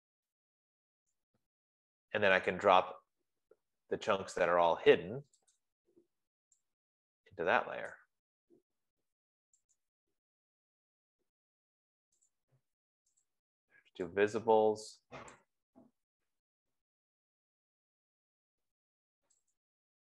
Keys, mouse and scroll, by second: 0.2-2.1 typing, 2.9 click, 6.1 shift+click, 8.2 click, 10.4 click, 12.8 click, 13.8 shift+click, 15.7 click.